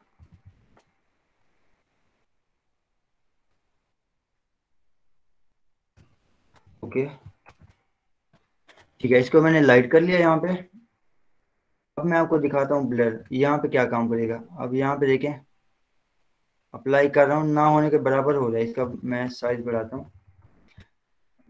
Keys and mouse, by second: 0.5 ctrl+j, 1.9 alt+i, 2.1 y, 4.0 click, 5.8 Return, 6.8 ctrl+0, 7.3 ctrl+shift+e, 8.2 ctrl+j, 9.1 z, 11.3-19.1 drag, 19.1 ], 19.4 ctrl+z, 19.6 ctrl+], 20.3 ], 20.5 ], 21.4 click.